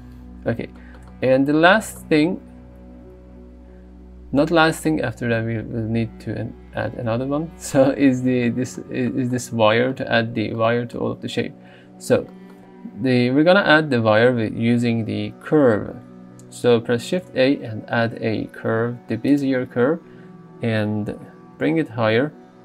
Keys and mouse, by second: 10.6 middle click, 17.3 shift+a, 21.6 g, 22.0 z.